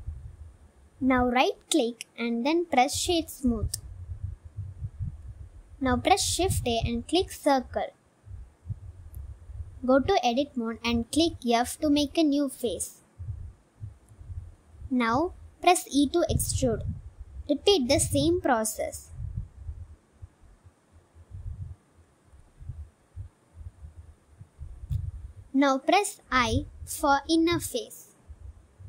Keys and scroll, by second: 0.6 Tab, 2.4 Tab, 8.5 shift+a, 10.3 s, 11.5 Tab, 12.4 f, 13.1 Tab, 13.5 g, 13.7 y, 14.1 x, 16.0 Tab, 16.5 e, 19.4 e, 21.2 s, 21.9 e, 24.0 g, 24.2 z.